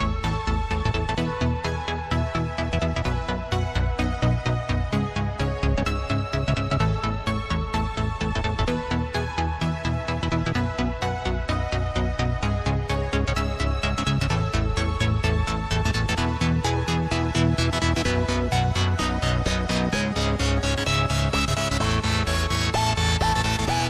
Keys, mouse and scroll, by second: 1.0 alt+g, 3.8 drag, 4.5 KP_1, 5.3 click, 7.6 click, 8.8 click, 9.4 Tab, 10.9 click, 11.9 click, 12.7 shift+click, 13.6 shift+click, 14.6 click, 16.2 shift+click, 17.1 click, 18.9 click, 19.9 click, 20.3 click, 21.1 ctrl+z.